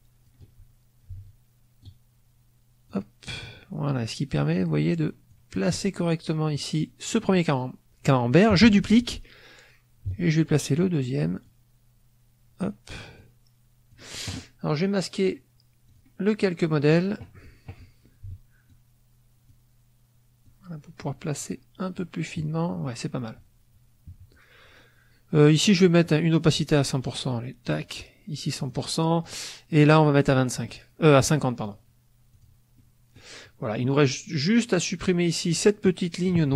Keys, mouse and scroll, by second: 1.7-3.0 drag, 4.3-5.4 drag, 10.0-11.5 drag, 13.1 click, 15.8 click, 16.7 middle click, 18.6 click, 20.3-21.5 drag, 27.0 right click, 27.8 click, 28.5 click, 29.1 click, 31.5 click, 32.3 click, 32.7 middle click, 34.6 click, 36.1 click.